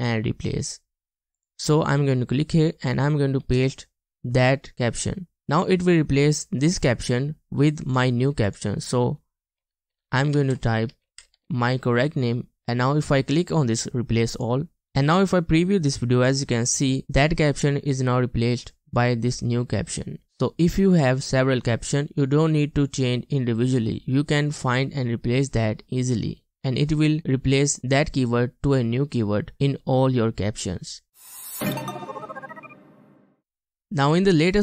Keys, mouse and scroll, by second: 3.6 typing, 9.6-11.5 typing.